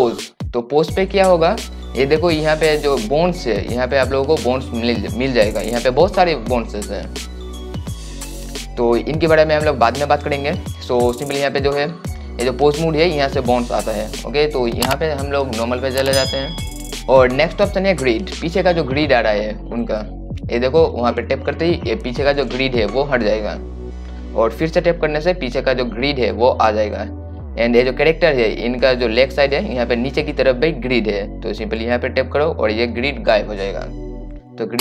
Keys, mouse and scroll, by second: 6.8 click, 20.2-34.8 drag.